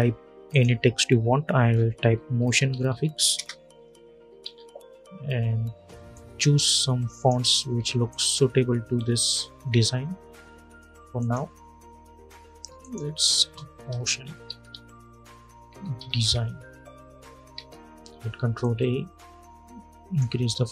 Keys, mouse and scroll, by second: 0.2 click, 1.6-3.3 typing, 4.1 ctrl+a, 5.8 click, 8.6-10.1 scroll up 1, 10.1-10.9 scroll down 1, 10.9 click, 13.1 Return, 13.7-16.4 typing, 17.3 ctrl+a, 18.3-20.7 drag.